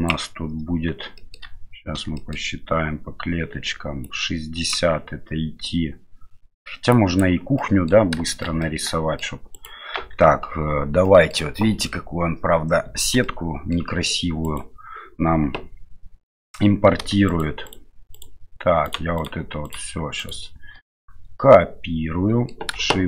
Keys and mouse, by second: 1.2 shift+middle click, 2.2 shift+middle click, 4.1 click, 7.0 click, 7.6 middle click, 8.3 shift+middle click, 8.7 middle click, 9.5 right click, 9.9 Tab, 11.0 middle click, 13.2 middle click, 14.4 right click, 17.6 shift+middle click, 18.1 shift+middle click, 18.8 shift+middle click, 19.2-20.3 shift+middle drag, 20.8-22.5 middle drag.